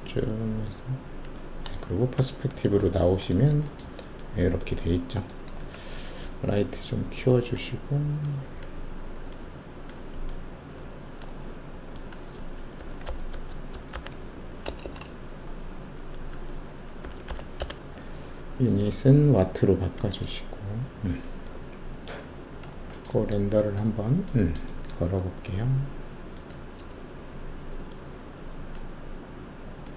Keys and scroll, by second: 2.1 alt+shift+q, 12.7-15.1 typing, 13.3 Caps_Lock, 17.0 typing, 17.6 Return.